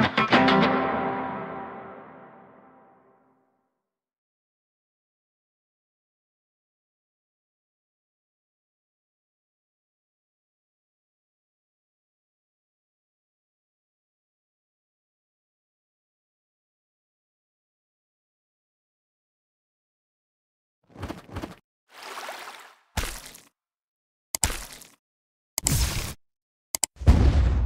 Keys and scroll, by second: 17.8 ctrl+s.